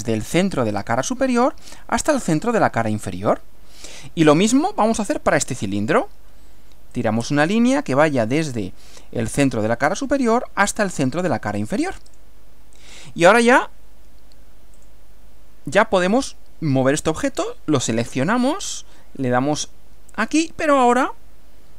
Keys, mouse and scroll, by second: 0.0 click, 2.4 click, 7.0 click, 9.4 click, 12.2 click, 14.8 click, 16.1 click, 19.3 click.